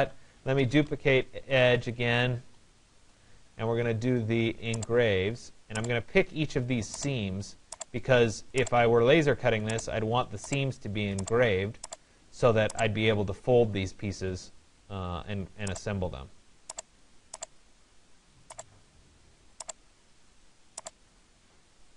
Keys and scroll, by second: 1.2 BackSpace.